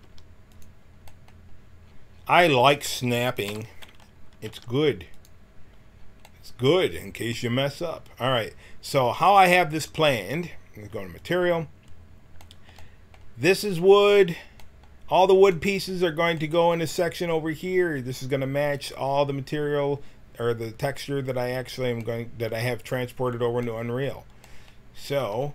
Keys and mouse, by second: 0.0 g, 2.5 a, 3.4 l, 4.4 g, 9.9-13.3 drag, 18.2-19.4 middle drag, 25.2 a.